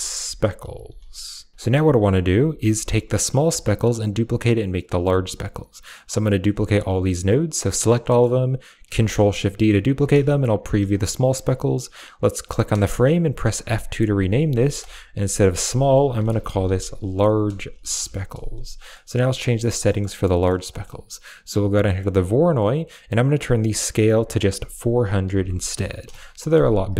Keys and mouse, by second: 1.9 drag, 2.4 click, 2.4 g, 2.6 a, 3.0 drag, 3.3 g, 3.6 click, 4.9 a, 6.0 click, 7.3-7.7 drag, 7.9 middle click, 8.8 ctrl+shift+d, 9.7 click, 9.8 a, 10.4 ctrl+shift+click, 12.1 click, 13.1 F2, 14.0 Right, 14.1 Right, 14.3 Right, 15.0 BackSpace, 15.2 BackSpace, 15.3 BackSpace, 20.2 middle click, 20.5 middle click, 21.3 click, 23.1-25.9 drag, 25.6 0.